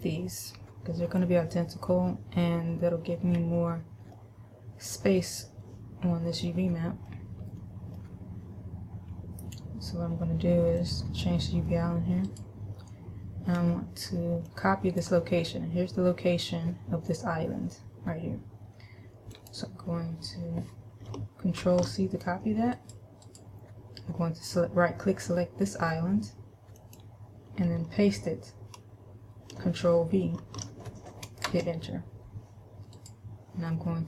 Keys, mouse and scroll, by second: 3.6-4.3 scroll down 1, 4.3 middle click, 6.7 middle click, 7.8 middle click, 9.6 scroll up 1, 11.1 click, 12.5 right click, 14.7 click, 19.5 click, 23.4 right click, 27.1 click, 33.2 right click.